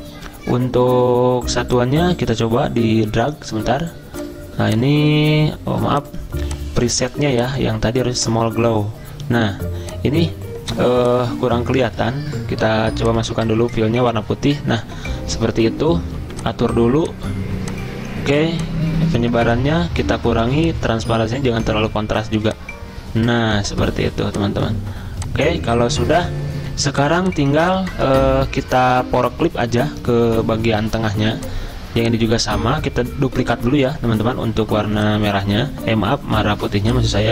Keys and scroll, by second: 11.9 ctrl+z.